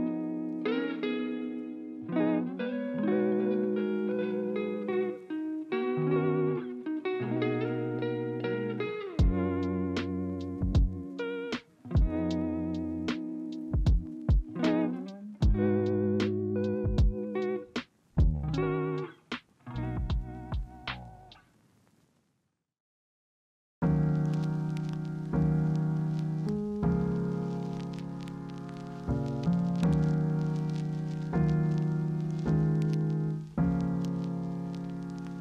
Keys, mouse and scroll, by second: 8.9 ctrl+z, 10.1 ctrl+c, 10.1 ctrl+f, 28.0 ctrl+c, 28.4 ctrl+f.